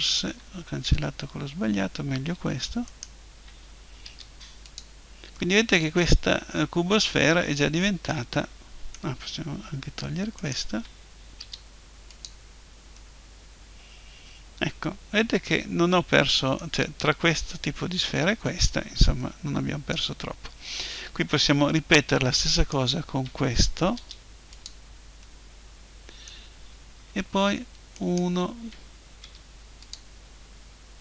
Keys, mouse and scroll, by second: 0.2 ctrl+z, 2.9-4.5 right drag, 4.1 Delete, 5.3-7.1 drag, 10.3-12.3 right drag, 11.4 Delete, 12.9 middle click, 14.7-22.5 middle drag, 22.5-23.9 right drag, 23.9 Delete, 24.3 middle click, 27.1 middle click, 27.9-29.9 right drag, 29.2 Delete.